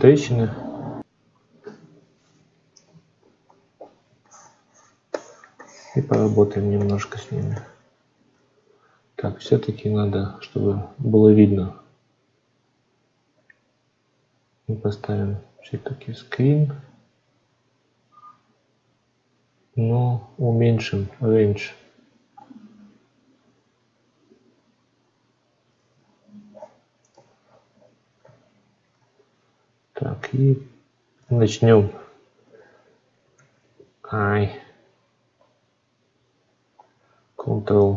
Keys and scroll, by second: 31.1 ctrl+z, 33.2 ctrl+z.